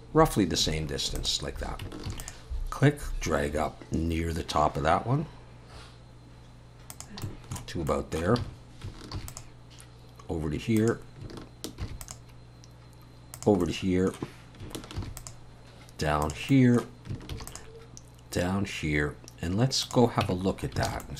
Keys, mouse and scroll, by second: 2.1 ctrl+r, 7.2 middle click, 7.9 middle click, 8.4 alt+a, 9.1 ctrl+r, 11.8 ctrl+r, 13.6 middle click, 15.0 ctrl+r, 16.5 middle click, 17.3 ctrl+r, 20.2 Tab, 20.5 scroll down 4, 20.9 alt+a, 21.0 middle click.